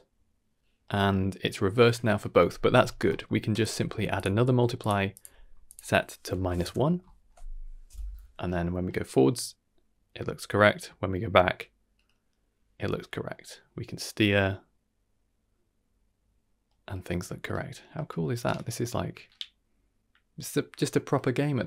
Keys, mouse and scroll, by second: 3.1 middle click, 3.6 click, 3.8 shift+d, 4.5 g, 5.1 click, 5.6-6.6 drag.